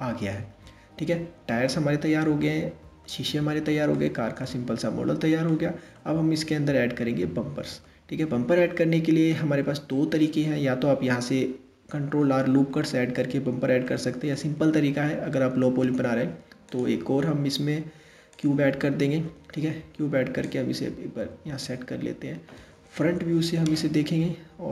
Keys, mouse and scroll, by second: 1.3 scroll down 2, 2.0-8.7 middle drag, 9.7-11.3 scroll up 1, 13.4-14.3 middle drag, 14.3 scroll down 2, 15.4 shift+a, 20.0 drag, 22.6 KP_1, 24.5 s.